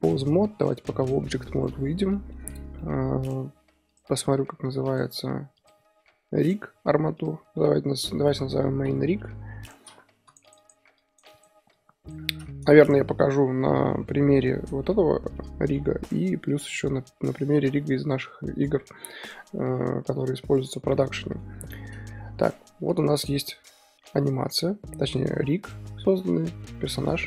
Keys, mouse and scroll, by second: 0.7-1.7 drag, 1.7 z, 2.1-3.9 middle drag, 3.9 click, 16.0-16.6 drag, 16.6-27.2 middle drag.